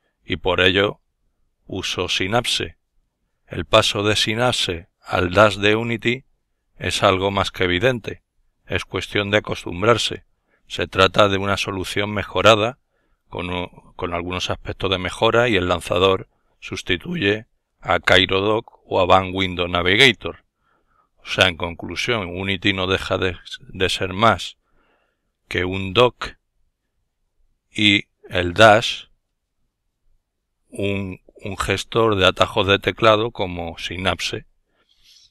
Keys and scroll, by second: 4.9 super+m, 11.0 super+m, 20.3 super+v, 26.5 super+v.